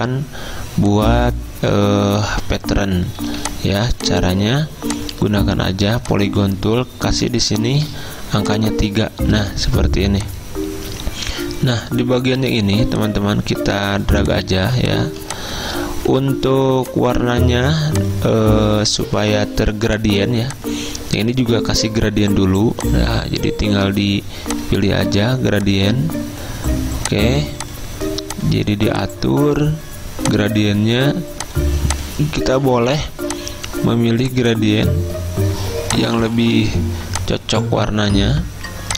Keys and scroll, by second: 7.9 3, 14.7 z, 16.2 v.